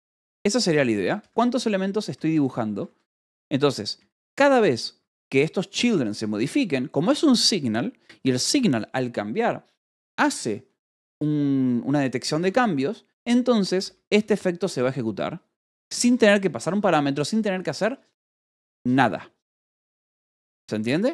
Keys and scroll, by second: 0.1-6.3 typing, 8.0 Escape, 13.1 k, 14.0 j, 14.6 ], 15.7 Escape.